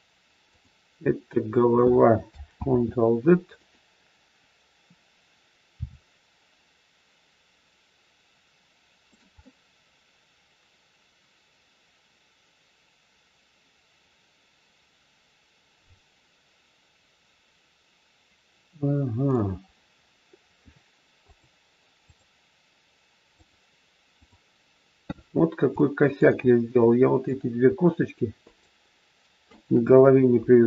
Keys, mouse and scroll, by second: 2.5 ctrl+z, 3.5 click, 5.7 r, 9.4 middle click, 21.3 click, 23.4 click, 25.7 shift+middle click, 26.4 scroll up 2, 26.9 middle click, 28.4 shift+click, 29.5 shift+click.